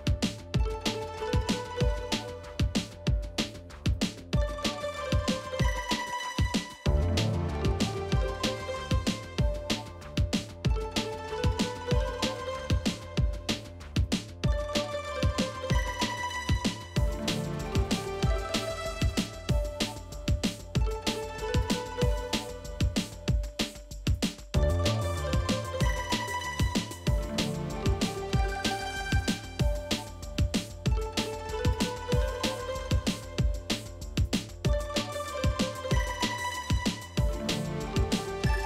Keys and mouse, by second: 0.4 middle click, 1.3 click, 1.6 g, 2.1 middle click, 2.9 g, 3.5 middle click, 4.3 click, 4.4 middle click, 4.7 g, 5.2 middle click, 5.9 g, 6.6 middle click, 7.6 middle click, 8.0 g, 8.4 middle click, 9.1 middle click, 9.5 g, 9.9 middle click, 10.8 middle click, 11.2 g, 11.8 middle click, 12.7 middle click, 13.1 click, 13.2 middle click, 13.6 g, 14.5 g, 15.1 click, 15.2 g, 15.7 click, 16.1 g, 16.4 Tab, 16.6 middle drag, 17.1 middle drag, 17.4-17.8 middle drag, 20.2 ctrl+s, 20.5-20.9 middle drag, 21.2 click, 21.6 middle drag, 21.8 shift+d, 22.9-23.3 middle drag, 23.7 Insert, 24.3 KP_7, 24.8 shift+middle click, 25.2 Tab, 25.8 middle click, 26.3 shift+middle click, 26.7 alt+z, 27.4 3, 27.8 KP_1, 29.3 click, 30.1 shift+click, 30.7 alt+z, 30.9 middle click, 31.5 x, 32.4 middle click, 32.8 middle click, 33.3 click, 34.4 click, 35.0 shift+click, 35.4 shift+click, 35.8 middle click, 36.3 shift+click, 36.6 shift+click, 36.9 shift+click, 37.6 middle click, 38.4 x.